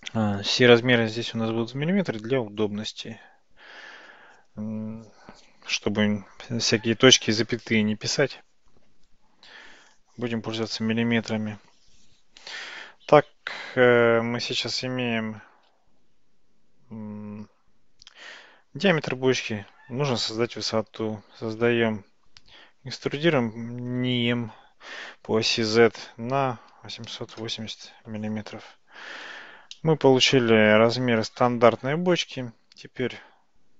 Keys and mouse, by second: 16.1 Tab, 21.4 e, 28.5 Tab, 29.8-33.2 middle drag.